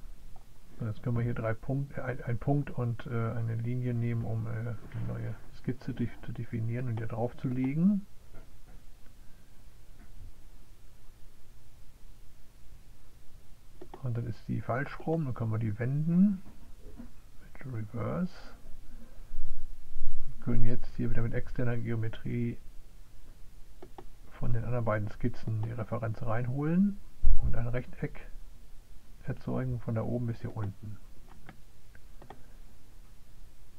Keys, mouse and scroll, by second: 4.7-6.2 middle drag, 6.2 click, 9.4 click, 11.4 middle click, 12.9 click, 15.8 click, 16.2 click, 17.0 click, 17.8 click, 20.5 click, 23.4 click, 26.7 click, 28.7 click, 29.9 click.